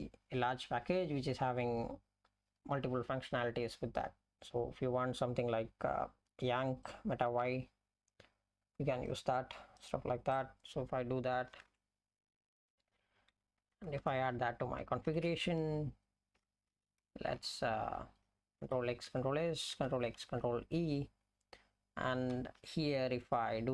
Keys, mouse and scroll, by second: 11.8 ctrl+g, 13.7 Left, 14.0 Return, 15.1 ctrl+y, 16.4 Left, 16.7 Right, 17.1 BackSpace, 17.4 BackSpace, 17.8 Right, 19.1 ctrl+s, 20.5 ctrl+e, 22.6 Return, 23.3 Return.